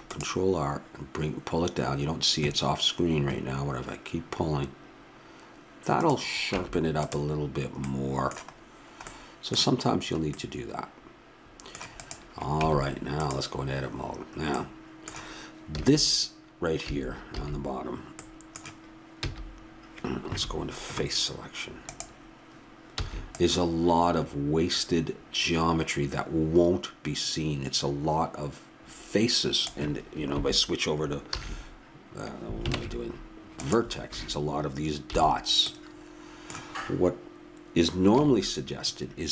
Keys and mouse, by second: 6.5 Tab, 10.1-11.5 middle drag, 12.0-12.6 drag, 12.6 Tab, 13.3 click, 15.8 a, 19.3 c, 21.9-23.7 drag, 23.0 c, 31.3 ctrl+a, 32.7 ctrl+Tab, 35.0 a, 38.2 KP_1.